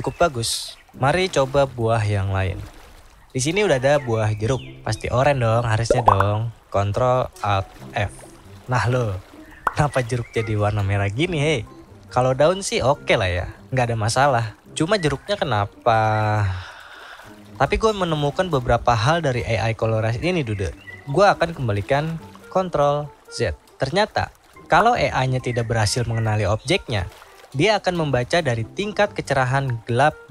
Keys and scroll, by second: 6.1 ctrl+alt+f.